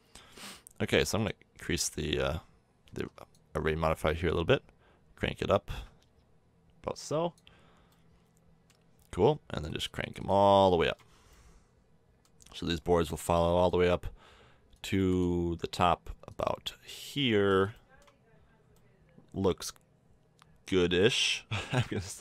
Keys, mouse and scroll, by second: 1.1-4.0 middle drag, 4.1-6.1 middle drag, 7.9 middle click, 8.3 middle click, 9.5-10.5 middle drag, 10.5-12.2 drag, 13.5-16.8 middle drag, 16.8-20.4 drag.